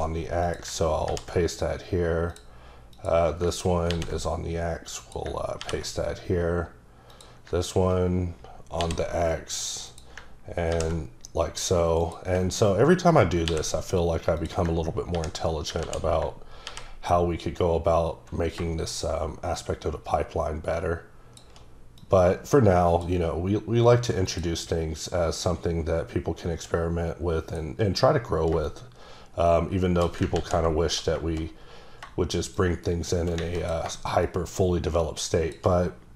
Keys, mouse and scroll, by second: 0.4 click, 1.1 ctrl+v, 2.3 click, 2.9 click, 3.9 ctrl+c, 5.0 click, 5.6 ctrl+v, 7.1 click, 8.8 ctrl+c, 9.9 click, 10.7 ctrl+v, 12.0 click, 14.4 click, 15.1 ctrl+v, 15.8 ctrl+z, 16.7 ctrl+v, 19.6 shift+click, 24.2 click, 25.4 click, 28.6 click, 30.3 ctrl+z, 32.6 shift+click, 34.2 shift+click.